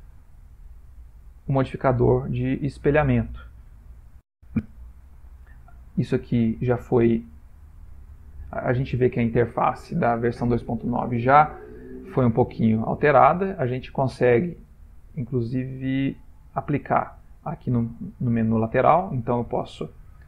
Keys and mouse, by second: 6.5 click, 6.9 middle click, 8.3 click, 13.2 right click, 16.0 click.